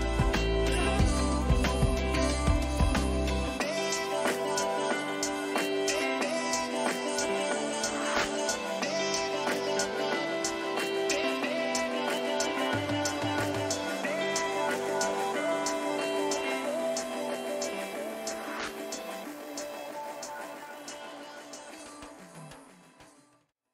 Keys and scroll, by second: 5.2 Return, 13.9 ctrl+-, 14.7 ctrl++.